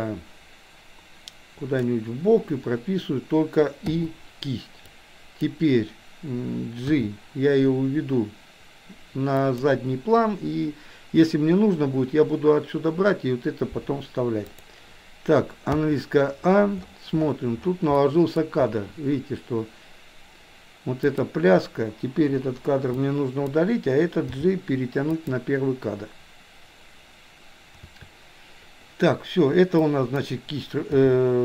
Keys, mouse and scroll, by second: 3.9 i, 4.9-5.5 drag, 6.9 g, 14.6 click, 15.8 a, 18.0 middle click, 21.1 click, 22.4 Delete, 22.9 click, 24.3 g, 27.9 a, 29.8-30.3 drag, 30.9 g.